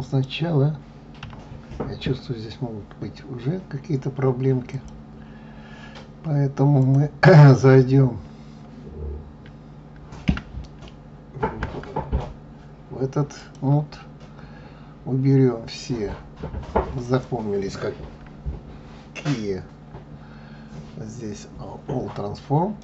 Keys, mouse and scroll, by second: 0.0 click, 1.1 a, 4.6-6.8 drag, 10.2 \, 11.5 Tab, 13.3-16.3 drag, 17.8 Tab, 18.8 Tab, 19.1 Tab, 22.7-22.8 middle drag.